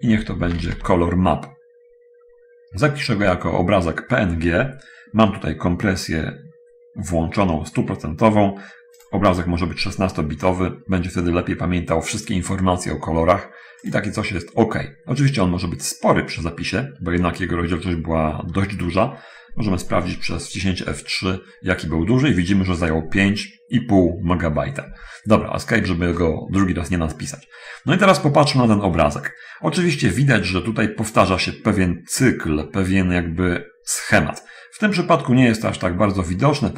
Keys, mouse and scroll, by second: 0.0-0.9 typing, 9.4 click, 14.0 click, 21.2 F3, 25.2 Escape, 33.9-34.4 scroll up 1, 34.6-35.2 scroll down 1, 35.2 scroll down 1, 35.5-36.7 middle drag.